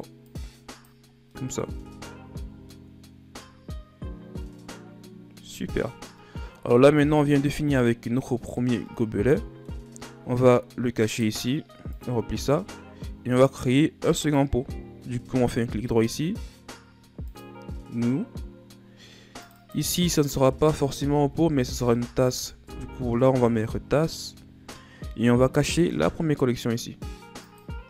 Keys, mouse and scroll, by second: 0.2 click, 1.0 scroll down 3, 1.3 middle click, 1.7 Tab, 2.1 a, 2.4 scroll down 2, 2.6-5.6 middle drag, 5.7-6.1 scroll down 1, 6.1 middle click, 7.0-7.5 scroll down 4, 7.5-8.5 middle drag, 8.5 scroll down 3, 8.8-9.9 middle drag, 9.9-11.5 scroll up 5, 11.8 click, 13.2 click, 14.1 right click, 19.3-21.4 drag, 21.4 s, 27.4 click.